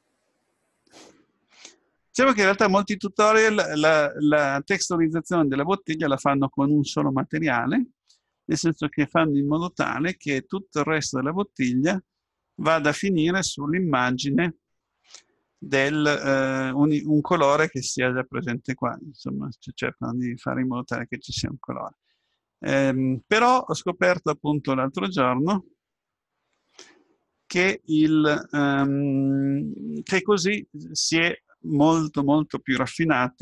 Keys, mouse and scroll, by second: 0.1-1.6 scroll down 1, 1.6-2.3 scroll up 1, 2.3 middle click, 2.7-3.5 scroll up 1, 3.5-5.5 middle drag, 23.5-24.0 scroll up 1, 24.0-25.0 middle drag, 25.0-26.3 scroll down 1, 28.1-30.2 middle drag, 30.2-31.4 scroll up 1.